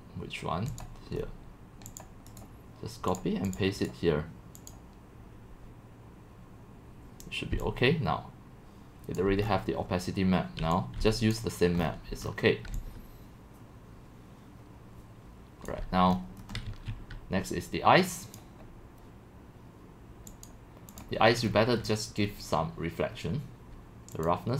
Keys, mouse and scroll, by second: 1.2 scroll down 1, 1.2-2.0 middle drag, 2.0-7.5 drag, 7.5 c, 8.1-9.2 c, 9.4 right click, 9.5 scroll, 10.4-16.7 typing, 11.4 click, 11.8 click, 12.2 click, 16.1 middle click, 18.4 click, 21.0 click, 21.5-23.0 scroll, 21.5-24.3 middle drag, 24.3 click.